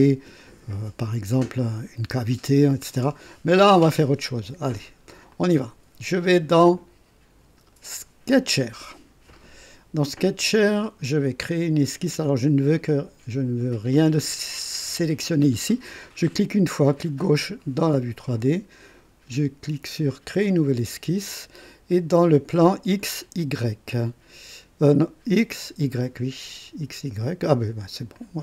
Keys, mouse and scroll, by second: 8.4 click, 17.2 click, 20.4 click, 28.1 click.